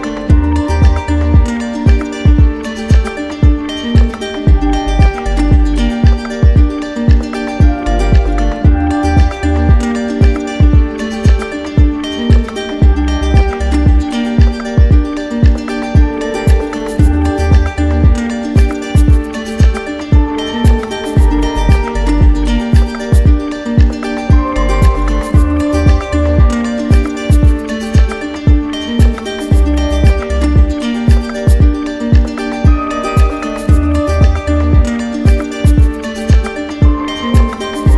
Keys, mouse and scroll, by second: 0.5 click, 6.2 click, 7.1 click, 13.7-14.8 right drag, 17.4-18.5 drag, 19.0 right click, 20.8 z, 21.6 click, 22.6 alt+click, 23.2 alt+click, 23.4 alt+click, 23.9 alt+click, 24.8 click, 25.6 shift+click, 27.1 shift+click, 27.1 alt+click, 30.1 click, 34.9 click, 37.2 click, 37.8 shift+click.